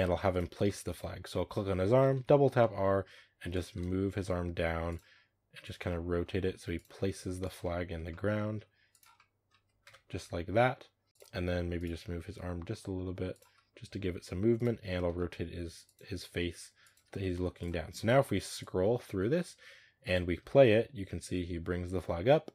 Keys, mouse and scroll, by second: 0.2 right click, 0.5-1.0 shift+middle drag, 1.0-1.8 scroll down 1, 1.9 r, 3.9 r, 5.0 r, 5.8-6.3 middle drag, 6.3 r, 6.8 r, 7.5-8.4 middle drag, 8.4 r, 9.0-9.7 middle drag, 9.7 KP_0, 11.1 r, 11.6 right click, 12.1 r, 14.4 right click, 14.9 r, 16.0 r, 16.8 r, 18.4-20.3 drag, 20.3 space.